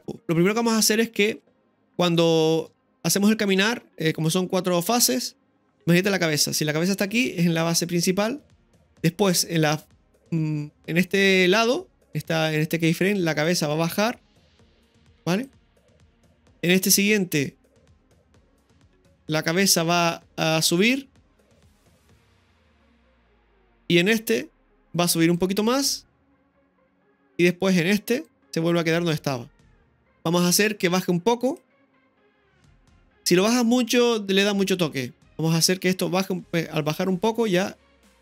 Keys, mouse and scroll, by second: 2.8-3.5 shift+middle drag, 5.6 click, 7.6-8.8 drag, 13.4-15.5 drag, 16.8-18.7 drag, 19.6 click, 21.9-23.5 drag, 25.3-26.8 drag, 28.3-30.0 drag, 30.0 Delete, 30.0 right click, 31.4 click, 32.7-33.7 right drag, 33.7-38.2 drag.